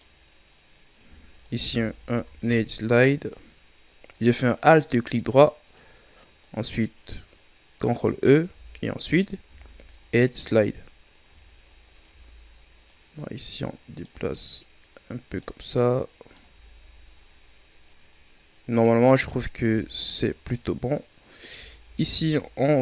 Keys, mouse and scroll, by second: 2.2 ctrl+e, 6.4-8.6 right drag, 8.6 Tab, 9.1-9.5 scroll down 3, 9.5 a, 9.9-10.5 scroll down 1, 10.5-10.9 ctrl+scroll down 2, 10.9-12.1 scroll up 5, 12.1 Tab, 12.9 right click, 14.4-16.6 right drag, 16.6 Tab, 17.0-17.9 scroll down 5, 18.1-19.1 scroll down 4, 19.1-19.7 scroll up 6, 19.7 Tab, 20.0-22.8 scroll up 1.